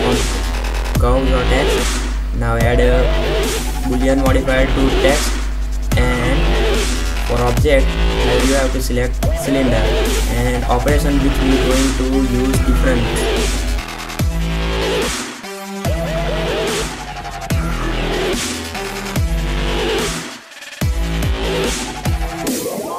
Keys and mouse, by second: 0.8 middle click, 1.5 middle click, 1.6 click, 2.1 middle click, 3.0 click, 7.9-8.3 middle drag, 8.3-9.6 drag, 10.4 click, 11.1-11.9 drag, 11.9 a, 12.3 a, 12.8 click, 13.3 Tab, 13.6 Tab, 13.8 Tab, 13.9-15.1 typing, 16.3 Tab, 16.4 middle click, 17.3-17.8 drag, 18.8-19.7 middle drag, 19.7 ctrl+alt+s, 21.3-21.8 drag.